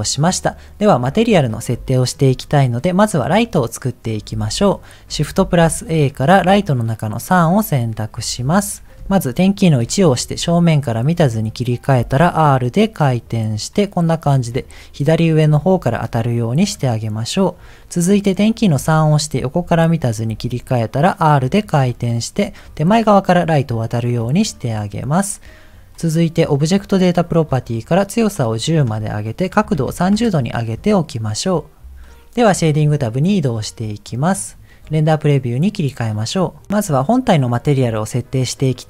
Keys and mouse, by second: 1.8 shift+middle click, 4.3 ctrl+s, 5.3 shift+a, 10.0 KP_1, 12.0 r, 18.9 KP_3, 20.3 r, 24.7 middle click, 26.5 click, 27.7 click, 28.8-30.3 drag, 32.9 click, 36.4 click, 36.9 click.